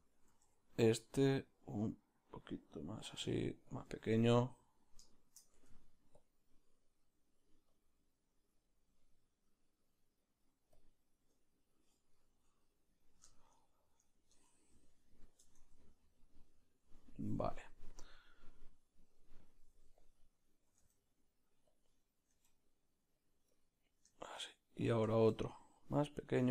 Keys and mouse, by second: 0.3 r, 2.1 r, 4.8 g, 4.8-7.4 shift+middle drag, 6.3 Tab, 7.4-14.5 drag, 9.1-19.5 middle drag, 14.5 Tab, 19.5-23.5 drag, 20.8 r, 23.5 g, 23.5-26.5 middle drag.